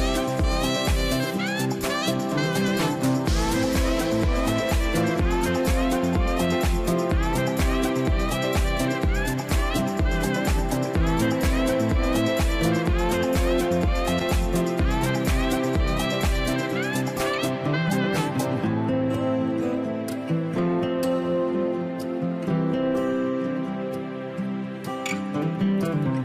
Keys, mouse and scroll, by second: 1.0-3.2 drag, 3.5-5.5 drag.